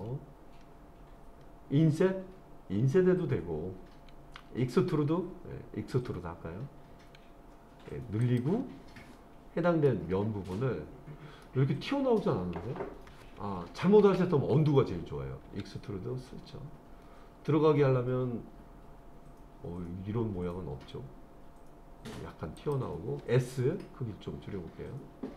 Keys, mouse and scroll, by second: 0.6 scroll up 1, 1.4-2.4 scroll up 1, 5.9 e, 8.2 click, 9.1-9.9 scroll down 1, 9.9 middle click, 11.4 middle click, 14.0 ctrl+z, 15.5 e, 22.6 click, 23.3 s.